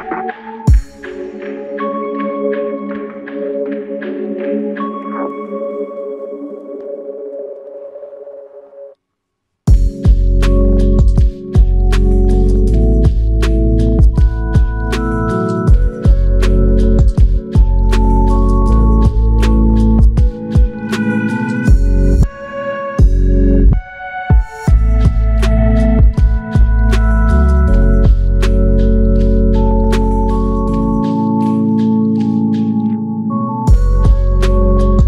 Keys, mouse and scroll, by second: 0.4 shift+click, 4.6 shift+click, 7.1 alt+click, 8.0 shift+click, 10.0 shift+click, 12.7 alt+click, 14.1 shift+click, 22.3 5, 22.7 Return, 29.4 ctrl+alt+click, 31.3 f, 33.5 alt+shift+click, 34.2 alt+click.